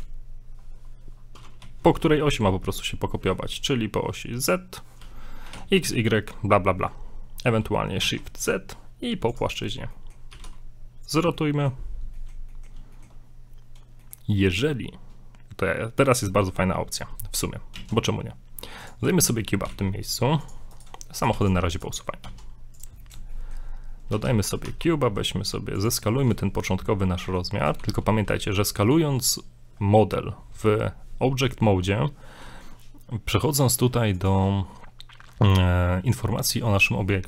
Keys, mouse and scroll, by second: 9.6 scroll down 2, 10.0 middle click, 10.3 r, 11.4 middle click, 11.8-12.2 scroll up 2, 12.2 shift+middle click, 12.5 middle click, 12.9 shift+middle click, 13.1 shift+scroll down 1, 14.0 middle click, 16.2 click, 17.8 shift+a, 19.2 shift+middle drag, 19.7 g, 20.7 right click, 21.2 shift+right click, 21.3 x, 22.3 s, 23.0 middle click, 23.3 shift+middle click, 23.7 scroll up 2, 24.1 s, 26.0 scroll up 1, 26.3 middle click, 26.7 scroll up 1, 27.1 middle click, 27.8 n, 34.1 click.